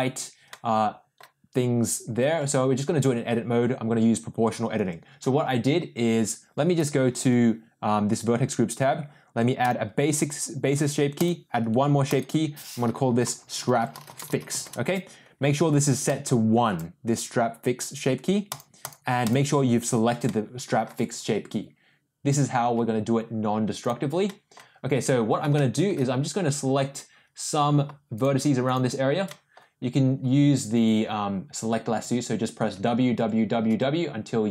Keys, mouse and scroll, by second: 0.4-1.1 middle drag, 2.4 Tab, 4.8 Tab, 6.7 click, 9.6 click, 11.1 click, 12.1 click, 12.1-15.1 drag, 16.1 click, 18.5 click, 18.8 click, 20.2 middle click, 22.7 Tab, 23.8 click, 24.2 middle click, 25.5 shift+middle click, 28.1 shift+click, 29.2 middle click, 32.0 w, 32.7 w, 33.1 w, 33.6 w.